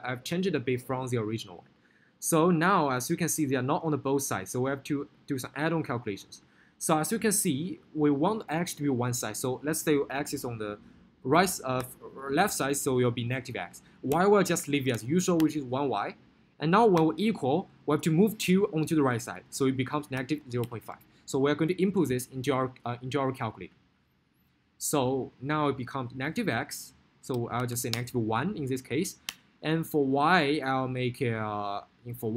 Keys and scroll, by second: 27.8 1, 28.1 Return.